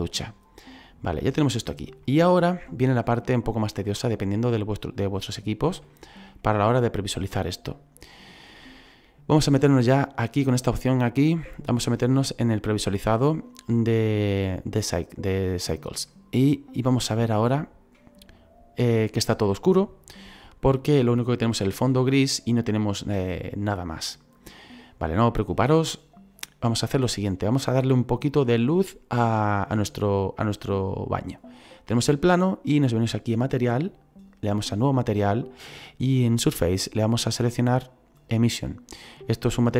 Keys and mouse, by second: 0.8 click, 2.0 middle click, 3.2 shift+middle click, 4.9 click, 5.9 shift+middle click, 11.6 click, 16.1 middle click, 17.5 shift+middle click, 33.6 click, 34.8 click, 37.0 click, 39.4 click.